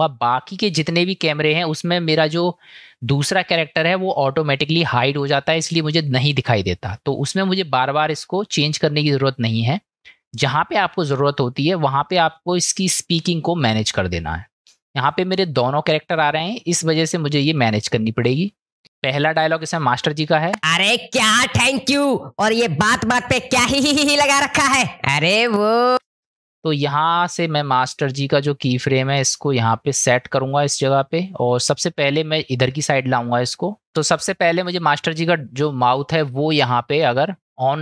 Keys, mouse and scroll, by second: 0.2 middle click, 9.0-10.0 middle drag, 15.4 click, 17.7 middle click, 17.9 middle click, 20.5 space, 25.9 space, 26.9-30.0 drag, 31.8 click, 33.8 space, 34.7 middle click, 36.5-37.2 middle drag, 37.4-37.8 middle drag.